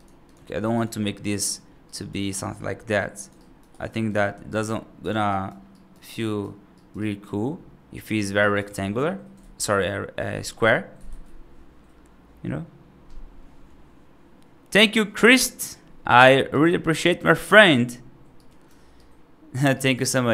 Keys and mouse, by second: 0.1 click, 1.1 right click, 1.8 right click, 2.3 middle click, 2.7 i, 3.2 right click, 3.6 g, 4.3 right click, 5.1 right click, 5.6 right click, 5.9 right click, 6.6 right click, 6.8 right click, 8.3 right click, 8.6 ctrl+z, 9.2 ctrl+z, 10.9 ctrl+z, 18.3 right click, 18.9 right click, 19.6 right click.